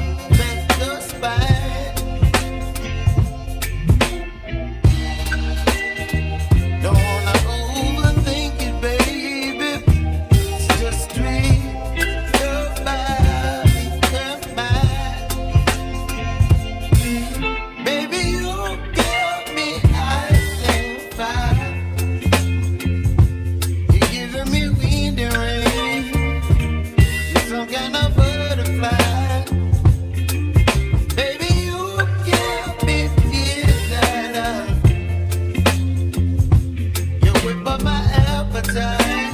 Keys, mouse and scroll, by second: 0.5 `, 1.9-3.1 shift+middle drag, 3.1 e, 5.9 middle click, 6.8 click, 7.5-10.0 middle drag, 12.0-12.7 scroll down 1, 12.7-16.1 shift+middle drag, 16.3-19.2 shift+middle drag, 19.2-19.9 scroll up 1, 19.9-21.8 shift+middle drag, 25.4 click, 33.3-35.0 scroll up 3, 35.0 Tab, 35.4 click, 39.2 shift+d.